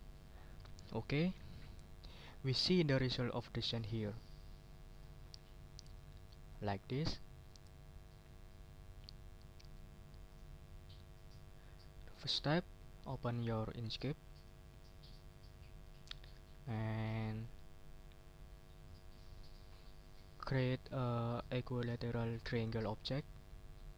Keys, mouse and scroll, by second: 4.9 click, 5.9-7.8 drag, 10.2 click, 14.3 click, 15.1 middle click, 16.2-17.2 middle drag, 17.4 middle click.